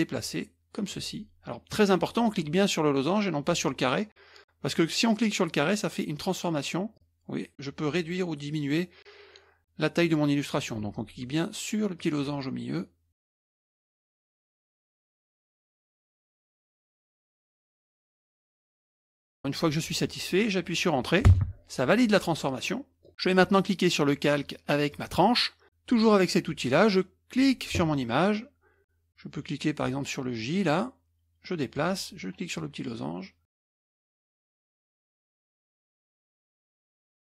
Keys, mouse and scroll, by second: 6.9-10.8 drag, 12.0-13.3 drag, 13.6 click, 14.3 click, 15.1 click, 16.0 click, 16.8 click, 17.8-18.2 ctrl+scroll up 1, 18.3 middle click, 18.8 ctrl+scroll down 1, 18.9 ctrl+middle click, 19.2 ctrl+scroll up 1, 19.2 ctrl+scroll down 2, 19.4 middle click, 21.2 Return, 22.6 middle click, 24.9 click, 27.3 click, 30.5-31.9 drag, 32.5-34.0 drag, 34.7-36.5 drag, 37.0-37.2 drag.